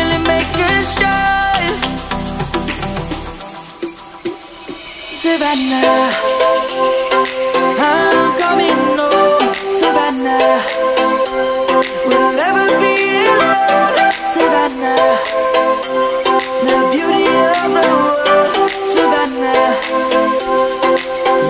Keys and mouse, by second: 2.3 Tab, 3.6 click, 5.5 middle click, 7.1 i, 11.2 Tab, 13.0 middle click, 16.5 ctrl+z, 16.8 ctrl+z, 17.1 ctrl+z, 17.4 ctrl+z, 19.0 ctrl+z, 19.5 ctrl+z, 19.8 ctrl+z, 20.1 ctrl+z, 20.6 ctrl+z, 21.0 ctrl+z, 21.3 ctrl+z.